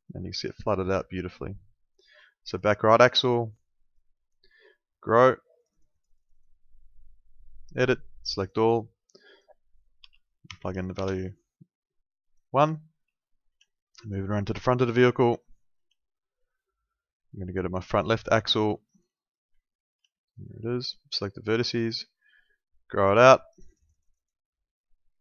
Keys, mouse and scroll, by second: 0.3 alt+middle click, 2.5 click, 10.0 1, 10.5 0, 11.0 Return, 11.0 KP_Enter, 13.0 alt+middle click, 14.7 alt+middle click, 17.9 click, 18.8 alt+middle click, 19.6 alt+middle click, 20.7 alt+middle click, 21.5 click.